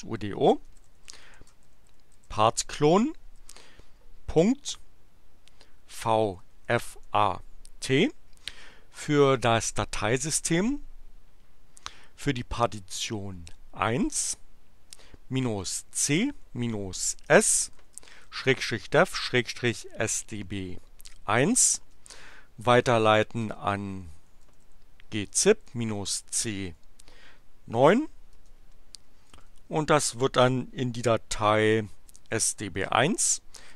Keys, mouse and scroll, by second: 0.0-3.3 typing, 5.8-7.4 typing, 15.1-20.2 typing, 21.8 space, 22.8 alt+<, 23.4 alt+space, 23.6-26.7 typing, 28.3 space, 29.2 shift+<, 31.4-33.7 typing.